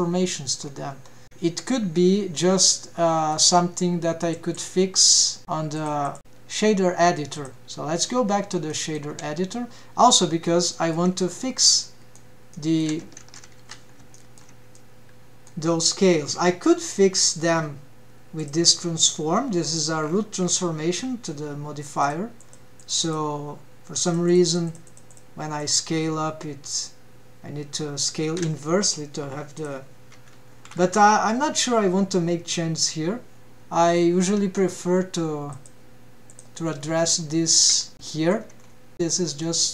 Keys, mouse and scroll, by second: 0.7-1.3 scroll up 5, 1.2 shift+middle click, 1.6 alt+a, 3.9-5.4 right drag, 6.2-8.1 drag, 8.6-9.1 scroll down 3, 9.3-9.7 shift+middle drag, 10.7-11.1 scroll up 3, 11.3 shift+middle drag, 11.8-12.3 scroll up 3, 12.4 shift+middle click, 13.1-13.5 shift+middle drag, 13.8 ctrl+Tab, 14.7-15.1 shift+middle drag, 15.3-16.2 middle drag, 16.9-17.4 scroll down 5, 18.3 scroll down 3, 19.0 drag, 19.3-19.7 scroll down 4, 20.3-21.3 scroll down 5, 20.3 click, 22.6 click, 23.0 click, 23.4 click, 23.6 click, 24.7 click, 24.9 click, 25.1 click, 25.3 click, 25.5 click, 25.7 click, 26.2-28.7 drag, 30.2-31.5 drag, 34.4-35.0 scroll up 4, 35.2 shift+middle click, 36.1-36.5 drag, 36.9 click, 37.4-37.8 scroll up 3, 37.8 shift+middle drag, 38.7-39.1 shift+middle drag.